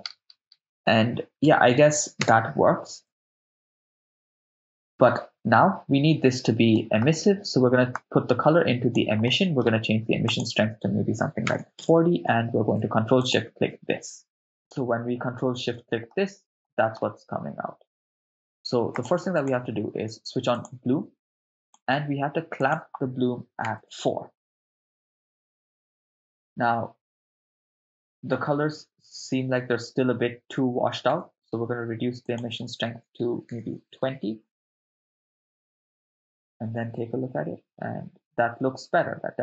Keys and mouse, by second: 2.2 KP_0, 3.2 shift+space, 5.0 shift+space, 6.7 middle click, 8.0-9.3 drag, 9.3 middle click, 10.3-11.8 drag, 13.4 ctrl+shift+click, 15.4 ctrl+middle click, 16.6 middle click, 18.9 click, 19.4 click, 20.6 click, 21.6 click, 22.6-23.8 drag, 26.5 shift+space, 31.1 shift+space, 32.2-33.9 drag, 36.2 shift+space.